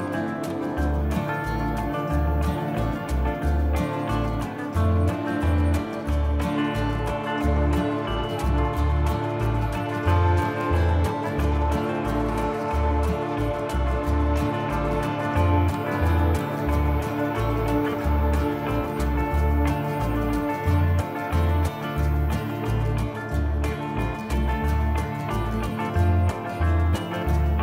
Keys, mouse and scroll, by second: 0.7 middle click, 16.4 click, 22.2 click.